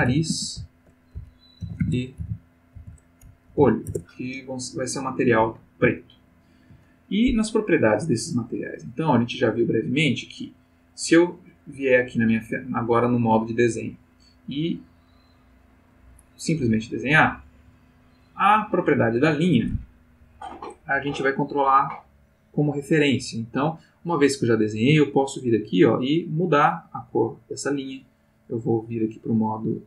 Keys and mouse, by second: 0.0-0.3 typing, 1.6-3.5 typing, 3.8 shift+Return, 5.9-6.9 ctrl+middle drag, 9.0 click, 12.0 click, 13.2 click, 16.2-17.4 drag, 25.4 click, 26.5-28.0 drag, 29.2 click.